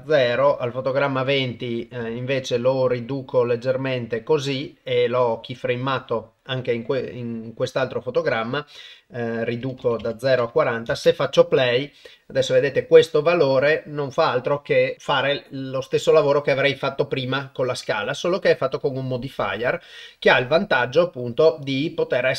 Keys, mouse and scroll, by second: 0.1 click, 1.3 click, 2.5-4.2 drag, 9.6 click, 10.9 shift+space, 19.4 click, 20.5 click.